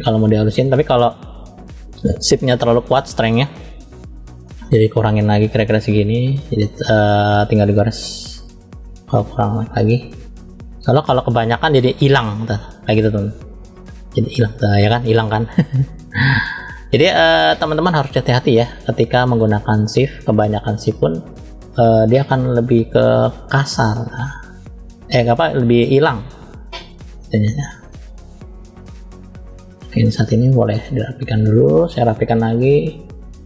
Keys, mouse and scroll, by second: 2.0-2.7 drag, 3.7 click, 4.7-5.8 drag, 7.3 click, 8.8 click, 9.7 click, 12.3 scroll down 1, 12.8-13.1 scroll down 2, 13.1-13.7 scroll up 1, 13.7 click, 16.3-16.9 drag, 17.3-17.8 drag, 18.9-19.6 drag, 22.1 middle click, 23.4 click, 27.2 click, 27.7 scroll up 1, 27.7 middle click, 28.7 click, 29.7 middle click, 30.5 click, 31.2 middle click, 32.2 click, 33.3 click.